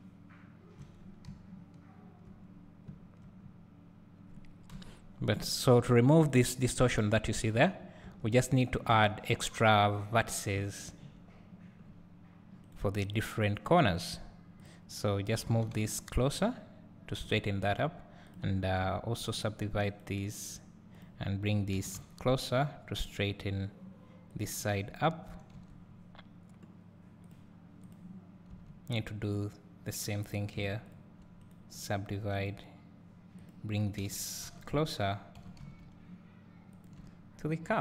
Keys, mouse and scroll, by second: 0.2 `, 0.9-1.3 scroll down 3, 1.3 `, 2.5-2.8 scroll up 2, 2.8 `, 3.4-3.7 scroll up 1, 4.7 KP_7, 5.3 scroll up 1, 6.4 click, 7.5 Tab, 8.5 click, 8.9 Tab, 9.8 click, 10.1-10.9 scroll down 1, 10.9 shift+click, 11.8 scroll up 1, 13.1 click, 13.9-14.6 scroll up 1, 14.6 click, 15.5 g, 17.6 scroll down 1, 18.3 click, 19.4 shift+click, 20.3 right click, 20.9 click, 21.7 g, 24.8-25.6 scroll up 1, 25.7 Tab, 26.0 scroll down 1, 27.9 click, 29.2 click, 30.9 shift+click, 32.3-33.5 drag, 35.4 g, 37.6 scroll up 1.